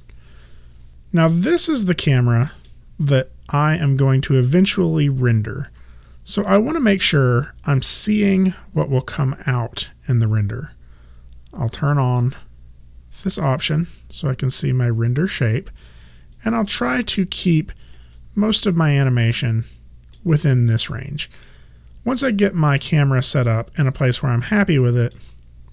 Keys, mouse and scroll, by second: 0.9 alt+middle click, 3.1 alt+right click, 12.0 click, 16.5 alt+right click, 18.2 alt+middle click, 21.6 alt+click, 23.4 alt+middle click.